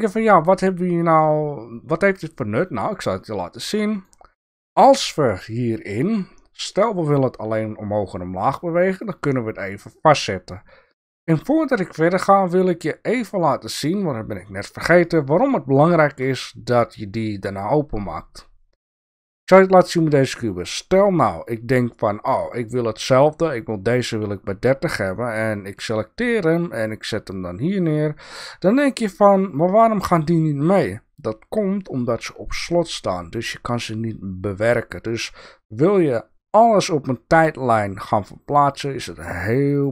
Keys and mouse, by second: 2.4-4.2 drag, 9.2 click, 20.2 click, 20.6-21.6 drag, 26.0-28.0 drag, 28.9-29.3 drag, 37.1-38.8 drag, 39.7 click.